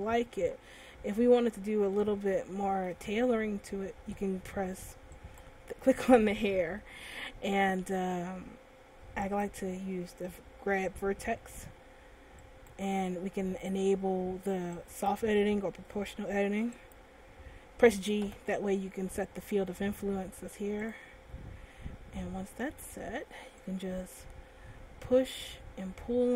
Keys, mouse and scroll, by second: 1.1 scroll down 1, 1.6 middle click, 2.6 shift+middle click, 4.2 Tab, 5.0 Tab, 5.9 right click, 7.6 Tab, 10.4 click, 13.3 right click, 15.1 click, 18.7 click, 18.9 g, 21.3 click, 22.5 middle click, 24.4 click.